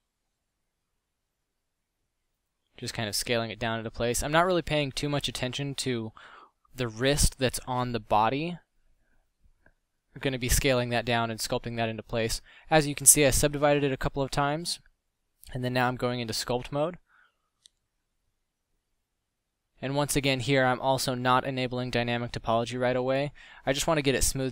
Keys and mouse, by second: 0.5 KP_Decimal, 1.5 s, 4.2 g, 5.2 middle drag, 6.0-9.1 typing, 6.9 Tab, 10.1 Tab, 20.7 f, 22.1-23.1 middle drag.